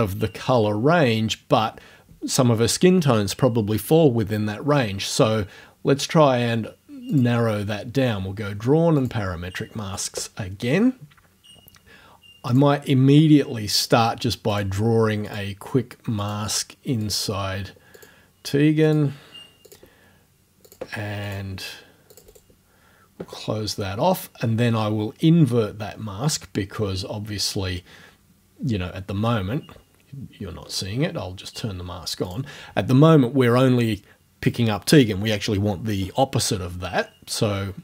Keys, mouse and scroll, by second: 5.8-6.3 scroll down 2, 7.1 click, 9.0 click, 12.5 click, 13.8 click, 14.6 click, 15.3 click, 16.3 click, 17.0 click, 18.0 click, 18.9 click, 19.7 click, 20.7 click, 21.3 click, 22.2 click, 22.4 middle click, 29.8-30.1 scroll down 1, 30.4 scroll down 1, 32.3 click, 37.4-37.8 scroll up 1.